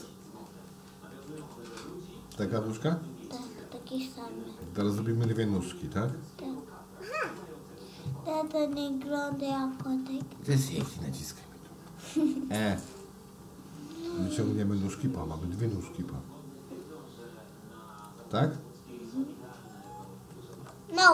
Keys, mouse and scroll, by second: 1.2 s, 4.6-6.1 middle drag, 7.1 click, 13.9 e, 20.2 s.